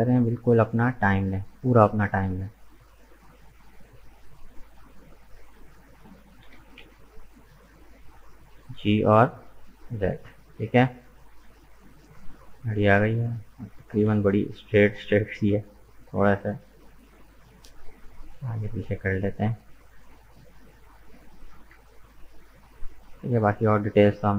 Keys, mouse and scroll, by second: 1.9-3.1 middle drag, 3.1 scroll up 2, 3.4-5.1 middle drag, 5.1 right click, 5.8 shift+right click, 6.4 g, 8.4-10.2 middle drag, 10.2-10.7 scroll down 2, 10.7 Tab, 10.8 right click, 11.2 middle click, 12.0 right click, 12.4 Tab, 13.8 alt+right click, 14.5 s, 17.9 alt+right click, 18.5 s, 21.9 Tab, 22.1 right click, 22.5-23.8 middle drag, 23.8-24.2 scroll up 2, 24.2 right click.